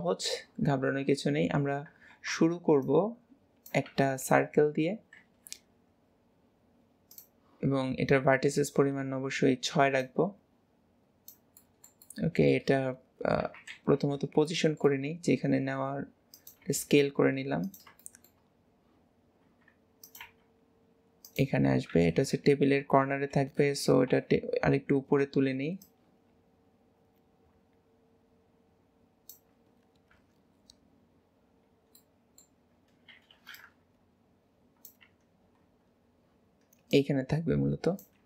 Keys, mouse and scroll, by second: 5.3 shift+a, 10.1 click, 11.7-13.5 middle drag, 13.5 KP_7, 13.8 alt+z, 14.6 shift+middle click, 15.1-15.7 scroll up 2, 15.7 s, 18.1-18.7 shift+middle drag, 18.7-19.5 scroll up 4, 19.5 s, 22.3 KP_4, 23.1 alt+z, 24.1 KP_3, 25.0-25.9 scroll down 4, 25.9 click, 30.2 KP_1, 31.4-32.1 scroll down 3, 32.1-33.6 middle drag, 33.6 click, 35.1 KP_1, 35.7-36.9 scroll up 3, 36.9 click.